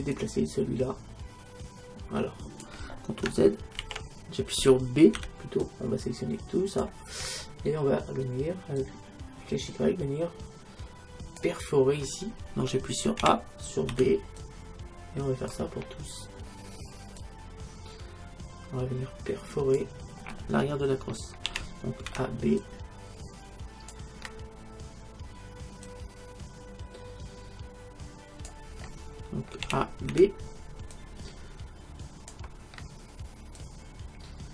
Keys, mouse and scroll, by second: 0.2-2.0 drag, 3.8 ctrl+z, 5.2 b, 8.8-10.6 drag, 13.2 a, 13.9 b, 17.2-19.1 drag, 21.5 a, 22.1 b, 25.9-27.8 drag, 29.7 a, 30.1 b, 33.6-34.5 drag.